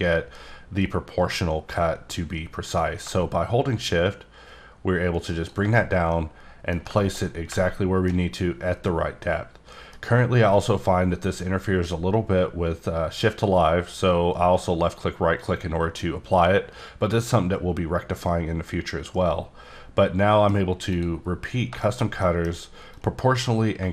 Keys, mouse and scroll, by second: 5.1 shift+right click, 6.1 middle click, 10.7 scroll up 2, 14.4 scroll down 1, 19.1 middle click, 20.9 click, 21.5 scroll down 2, 21.8 shift+scroll, 22.2 middle click, 22.9-23.9 drag.